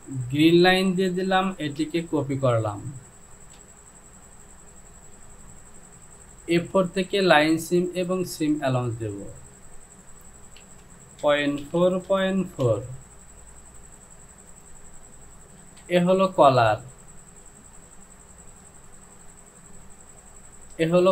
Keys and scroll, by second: 1.9 ctrl+c, 11.2 KP_Decimal, 11.7 KP_4, 11.9 Down, 12.1 KP_Decimal, 12.5 KP_4, 12.7 Down, 15.8 Home.